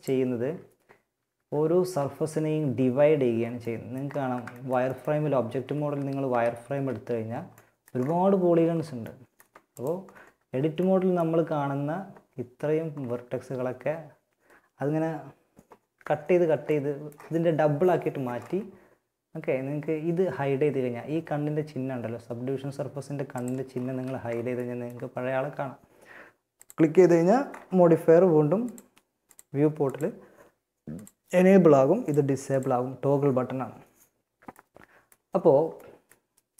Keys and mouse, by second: 0.5 Tab, 0.9 z, 2.3 Tab, 4.8 a, 5.5 z, 5.9 z, 6.2 middle click, 9.6 Tab, 15.1 Tab, 15.9-18.4 middle drag, 22.5-24.5 drag, 23.1 z, 25.7-27.5 drag, 27.9-33.7 drag.